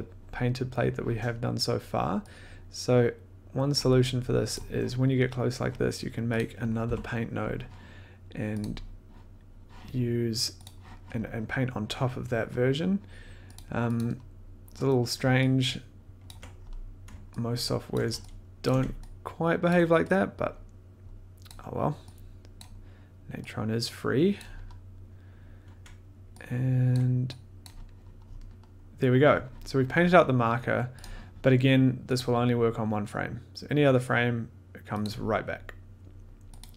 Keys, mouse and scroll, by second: 3.6 click, 4.5 click, 6.3 click, 6.8 p, 8.6 click, 10.6 click, 13.5 click, 13.9 click, 14.4 scroll, 16.3 ctrl+click, 16.5 scroll, 17.9 ctrl+click, 18.6 shift+click, 19.7 ctrl+click, 21.5 click, 22.6 click, 24.3 click, 26.9 ctrl+click, 27.6 click, 28.2 scroll, 31.0 click, 32.1 click, 35.0 click, 36.6 click.